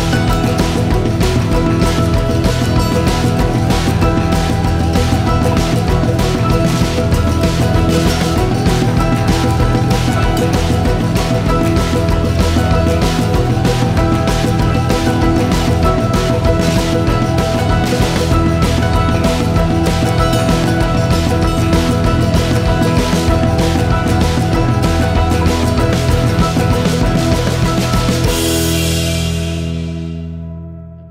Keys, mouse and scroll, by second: 12.8 s, 16.5 Tab, 16.7-17.1 scroll down 4, 17.5 scroll down 2, 18.6 shift+middle click, 19.0 click, 19.7 click, 20.6 click, 21.0-22.4 scroll down 27, 22.4-22.9 scroll down 8, 22.9-23.6 scroll up 5, 23.6-24.5 scroll up 1, 24.7 click, 24.8-25.4 scroll down 5, 25.4-27.4 drag, 30.7-31.1 middle drag.